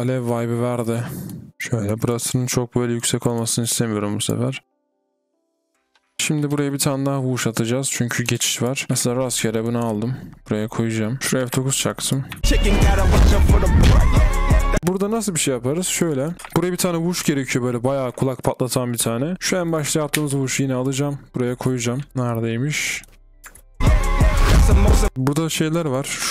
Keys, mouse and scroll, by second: 2.0-2.8 typing, 3.2 double click, 5.1-6.2 typing, 6.1 double click, 6.3-6.7 scroll down 2, 7.3 scroll down 1, 8.5 double click, 8.9 ctrl+d, 12.4 typing, 14.8 typing, 16.1 double click, 16.5-17.4 alt+scroll down 1, 18.3-18.8 alt+scroll down 1, 18.8 alt+scroll down 2, 20.1 ctrl+d, 21.1-21.9 alt+scroll up 1, 21.9 typing, 22.1 scroll down 1, 23.8 typing, 25.1-26.3 scroll up 1.